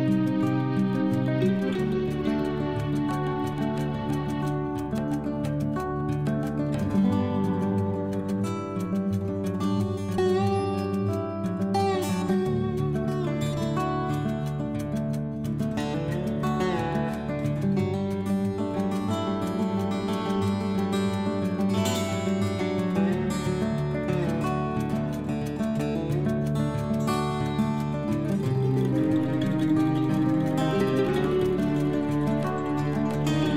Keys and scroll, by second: 24.5 ctrl+g, 27.1 ctrl+z, 29.9 ctrl+g, 32.6 ctrl+z.